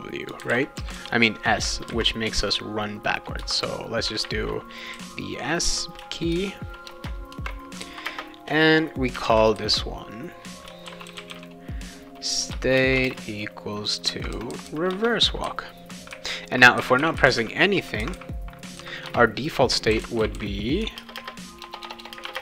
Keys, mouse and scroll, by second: 0.0-1.9 typing, 1.6 Return, 4.2 shift+9, 4.9 s, 5.7 Return, 6.3 shift+-, 6.9 BackSpace, 7.3 shift+0, 8.0 space, 9.1 shift+[, 9.2 shift+], 10.6-11.8 typing, 12.5 Return, 13.0 =, 13.1 space, 14.9 Return, 19.0 Return, 19.7-22.2 typing.